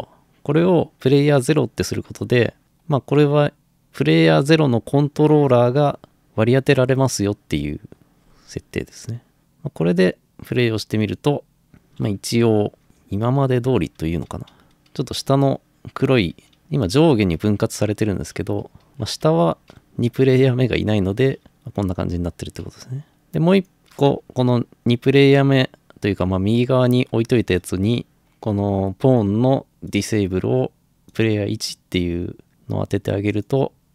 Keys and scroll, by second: 11.7-17.9 typing, 19.3 Escape.